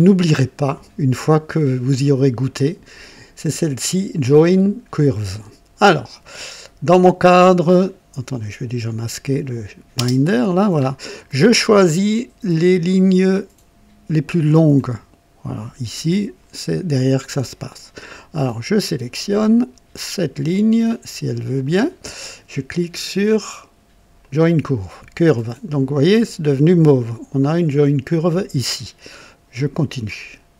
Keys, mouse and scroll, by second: 0.5-1.3 drag, 6.3-8.5 drag, 9.3 click, 9.9 space, 10.7 scroll up 2, 11.2-12.2 drag, 14.7-16.6 drag, 17.4 right click, 21.6 click, 24.1 click, 29.5 click.